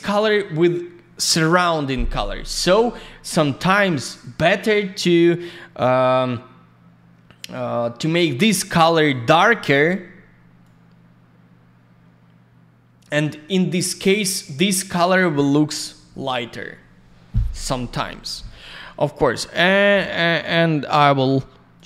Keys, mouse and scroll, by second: 3.6 middle click, 4.0 click, 4.1 click, 4.2 click, 4.3 double click, 8.9 click, 9.1 click, 10.6 click, 18.4 click, 18.5 click, 19.5 click, 19.6 click, 19.9 alt+middle click, 20.4 alt+я, 20.6 click, 21.7 click, 21.8 click.